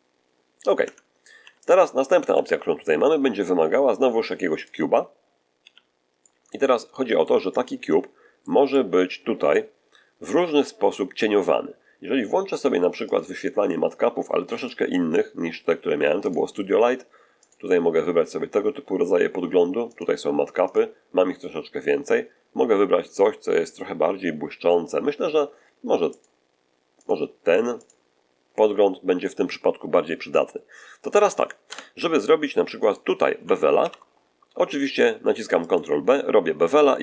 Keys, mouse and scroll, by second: 0.7 Tab, 1.3 x, 1.5 click, 2.2 shift+a, 4.5 click, 5.0 scroll down 1, 5.5 z, 6.1-6.6 middle drag, 6.7-7.3 middle drag, 8.6-9.6 middle drag, 12.9 click, 14.5 click, 16.1 click, 17.3 click, 19.8 click, 20.5 click, 26.0 click, 26.9 click, 27.7 click, 31.5 Tab, 32.7 right click, 33.7 ctrl+b, 35.5 click.